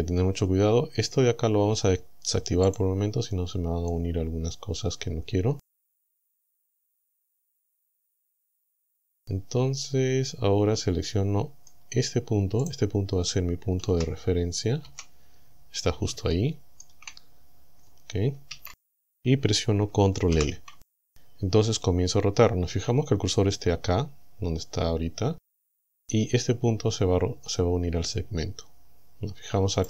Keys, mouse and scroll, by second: 2.7 click, 3.9-8.2 middle drag, 9.1-11.9 drag, 12.7 right click, 13.9 z, 14.9 KP_7, 16.3 shift+middle click, 18.5 KP_1, 20.3 ctrl+l.